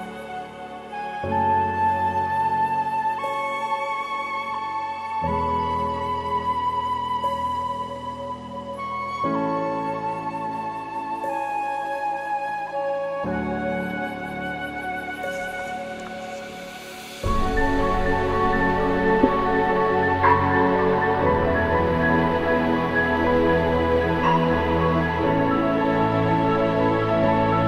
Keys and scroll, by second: 5.7 ctrl+d, 5.9 ctrl+=, 8.1 alt+BackSpace, 8.2 ctrl+d, 8.6 ctrl+-, 9.1 ctrl+=, 9.6 ctrl+-, 9.7 ctrl+-, 21.0 ctrl+=, 21.2 ctrl+=, 23.1 ctrl+=.